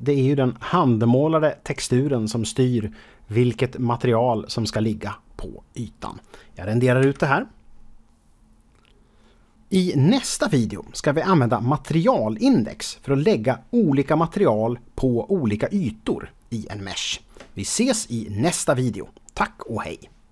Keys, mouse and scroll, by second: 7.4 F12.